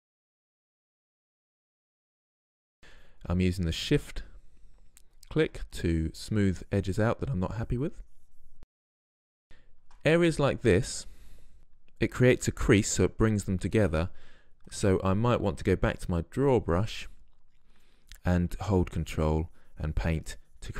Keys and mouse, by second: 0.4 n, 1.2 click, 1.6 f, 2.3-6.0 drag, 6.6-8.9 drag, 8.9-9.4 middle drag, 11.6-16.6 drag, 19.0-20.7 drag.